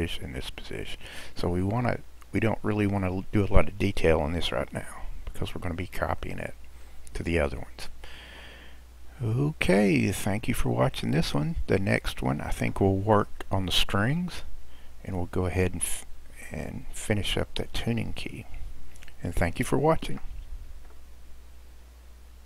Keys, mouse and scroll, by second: 1.4-1.9 scroll down 1, 1.9-4.9 middle drag, 5.1 scroll down 1, 5.7-6.2 scroll down 1, 6.2-7.5 middle drag, 7.5-8.2 scroll down 2, 8.2-9.6 middle drag, 9.6 click, 10.6-12.1 scroll down 1, 12.1-15.2 scroll down 1.